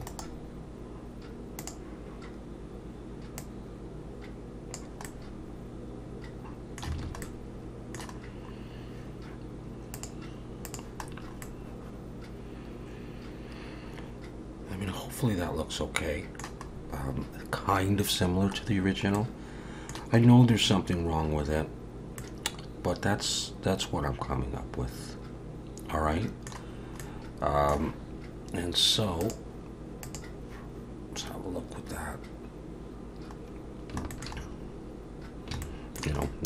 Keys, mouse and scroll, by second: 0.1 right click, 3.4 click, 5.1 middle click, 7.0 alt+a, 7.2 middle click, 8.2-8.9 scroll down 2, 8.9-10.0 scroll down 3, 10.0 click, 10.7 click, 11.1-11.9 scroll down 3, 11.4 middle click, 16.7-18.7 scroll up 2, 18.7-19.2 scroll down 1, 19.2 middle click, 20.3-21.2 scroll up 1, 21.4-21.8 scroll up 2, 22.2 middle click, 26.7-29.2 scroll down 3, 27.0 middle click, 29.2 click, 33.4-33.9 scroll down 2, 34.1 shift+middle click, 34.4-35.3 scroll down 1, 35.3 scroll down 1, 35.6 shift+middle click, 36.2 middle click.